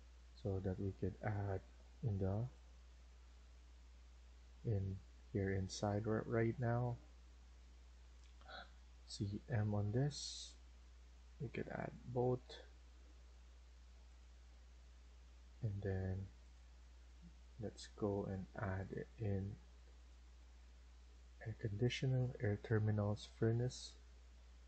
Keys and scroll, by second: 2.4-2.7 typing, 7.1 Escape, 7.7 Escape, 8.1 Escape, 8.9-9.4 typing, 12.1 Escape, 12.3 Escape.